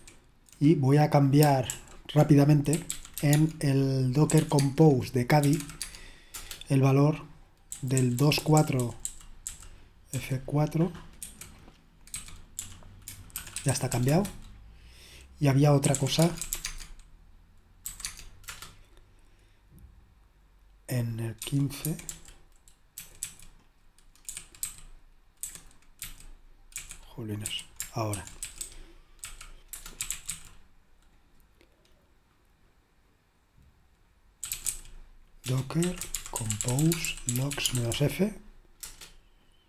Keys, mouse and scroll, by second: 0.0 super+1, 1.8 super+l, 2.5-10.1 typing, 11.2-13.9 typing, 14.1 Return, 15.7-18.4 typing, 18.4 Return, 21.4-23.2 typing, 24.2-30.2 typing, 34.3-39.0 typing.